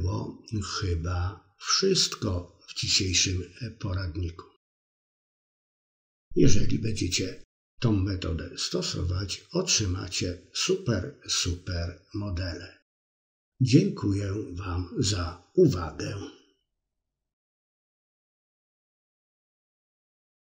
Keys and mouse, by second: 3.5 Tab, 5.1 l, 6.7 ctrl+i, 7.2 h.